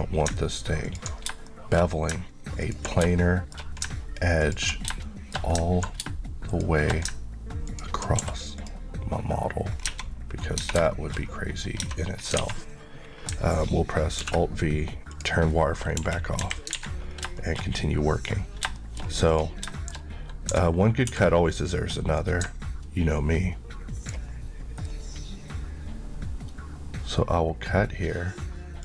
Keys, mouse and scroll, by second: 0.9 ctrl+click, 1.5 shift+middle click, 2.2-2.7 ctrl+scroll up 1, 2.7 ctrl+click, 3.2 shift+middle click, 4.5 ctrl+click, 5.1 shift+middle click, 6.5 shift+click, 8.2 ctrl+q, 8.6 click, 9.8 scroll down 1, 10.8 shift+Tab, 10.9 shift+middle click, 11.2-11.8 shift+scroll up 2, 11.8-12.4 scroll down 2, 12.4 alt+a, 14.2 alt+v, 15.1 click, 16.0 KP_1, 16.8 alt+a, 17.1 scroll down 2, 17.4 shift+middle click, 17.7-18.7 shift+scroll up 1, 18.8 shift+middle click, 19.3 click, 19.8 shift+middle click, 20.0-20.5 shift+scroll up 1, 20.5 d, 21.1 Escape, 22.2 click.